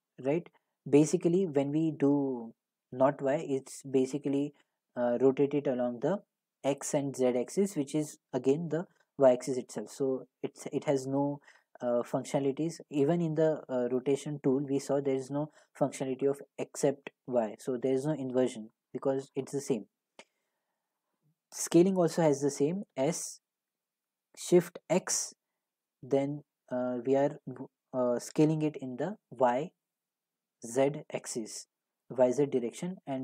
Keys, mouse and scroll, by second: 12.8 click, 14.0 click, 20.5 click, 21.0 click, 22.9 s, 24.9 x.